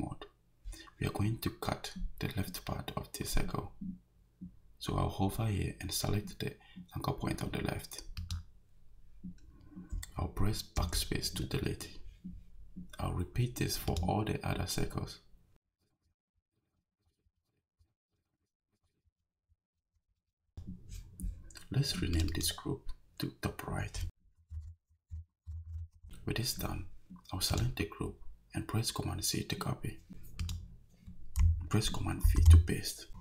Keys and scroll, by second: 10.8 BackSpace, 16.0 Return, 17.0 BackSpace, 17.7 Return, 18.7 BackSpace, 19.4 Return, 19.8 BackSpace, 20.4 Escape, 24.2-26.2 typing, 32.2 super+v.